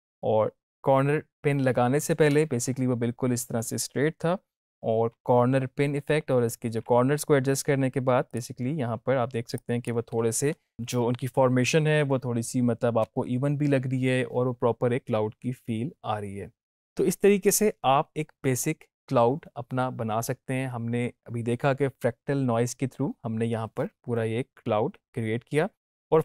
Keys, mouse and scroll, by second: 2.2 space, 5.0 space, 8.2 click, 12.9 space, 25.9 space.